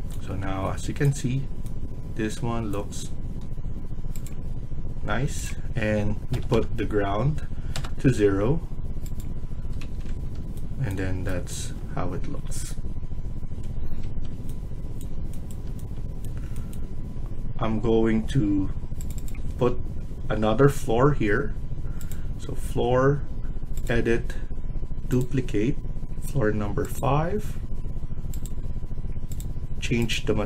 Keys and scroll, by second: 6.2 0, 6.4 0, 7.7 Return, 9.7 Escape, 10.0 Escape.